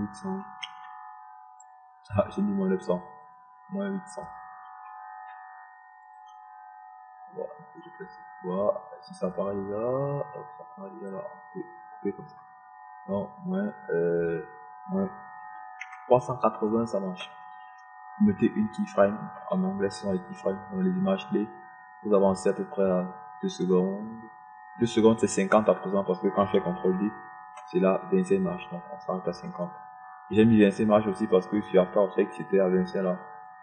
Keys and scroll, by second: 1.8 KP_Subtract, 2.4 KP_9, 2.9 KP_0, 6.9 -, 7.7 8, 17.8 KP_8, 18.1 KP_0, 29.1 ctrl+d.